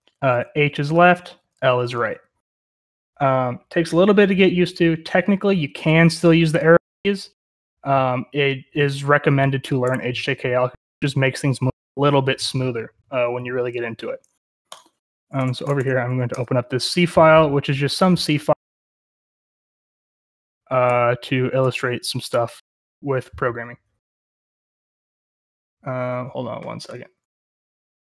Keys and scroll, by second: 0.0-2.8 typing, 5.6 Up, 5.7 Up, 5.9 Up, 6.0 Down, 6.2 Down, 6.3 Down, 6.5 Left, 6.6 Left, 6.7 Left, 6.9 Left, 7.0 Right, 7.1 Right, 7.2 Right, 7.5 Right, 15.2-16.3 typing, 21.0 ctrl+-, 21.6 ctrl+-.